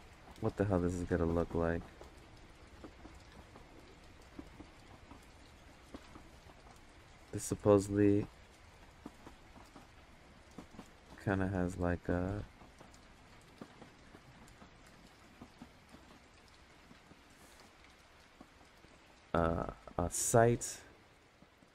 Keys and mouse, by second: 2.8 click, 7.5-9.7 drag, 9.8 ctrl+z, 10.4-12.6 drag, 13.5 ctrl+z, 14.3-16.5 drag, 19.0 click.